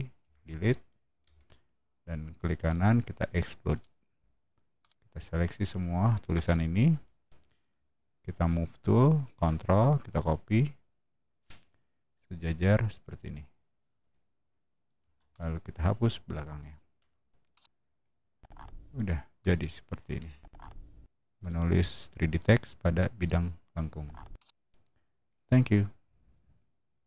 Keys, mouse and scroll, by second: 0.1 Delete, 0.5 middle drag, 1.1 Escape, 2.5 right click, 3.6 click, 4.7-5.9 drag, 6.3-6.9 middle drag, 7.5 m, 8.3 click, 13.9 shift+click, 14.9 space, 15.2-15.9 drag, 16.9 Delete, 17.4-17.9 middle drag, 18.3 middle click, 19.3 click, 19.3 right click, 20.3 middle drag, 21.3 click, 21.3 right click, 22.2 click, 22.2 middle click, 22.2 right click, 23.0-23.6 middle drag, 23.8 scroll down 1, 24.2-25.2 middle drag.